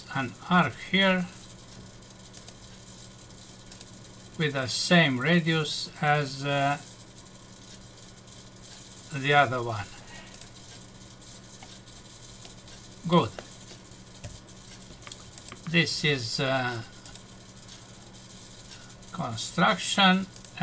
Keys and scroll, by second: 14.2 Escape.